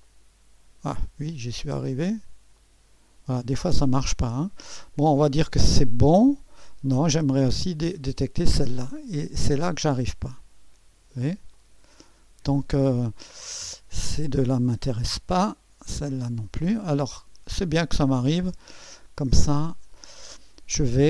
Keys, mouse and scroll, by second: 0.0-1.1 drag, 2.5-5.7 drag, 8.0 click, 9.4-10.4 drag, 11.5 click, 13.2 click, 14.4 click, 15.1 Delete, 16.2 click, 16.5 Delete, 17.5-18.7 drag, 19.4 click.